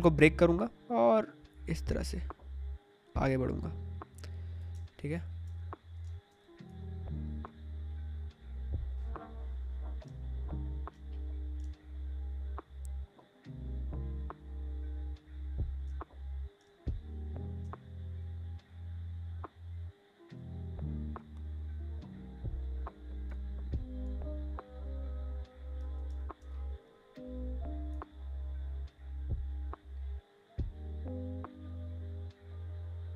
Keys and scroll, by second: 4.6 space, 10.0 space, 26.0 space.